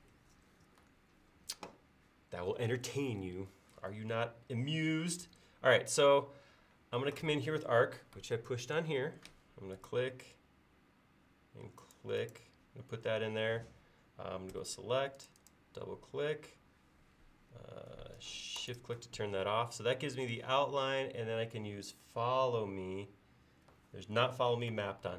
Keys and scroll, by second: 5.3 a, 14.6 space, 16.2 space.